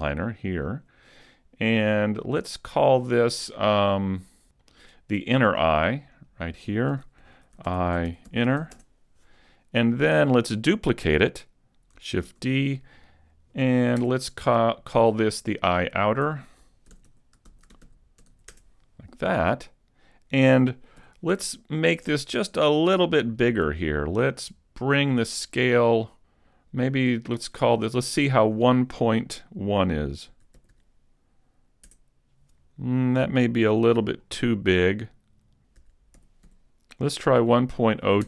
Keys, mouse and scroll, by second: 4.6 click, 5.9 click, 6.2 click, 8.4 n, 10.0-10.4 scroll up 2, 10.4 middle click, 12.2 shift+d, 16.0 click, 19.3 click, 21.0 n, 22.9 click, 26.9 click, 33.7 z, 34.2-34.8 scroll up 2, 34.8 middle click, 36.0 click.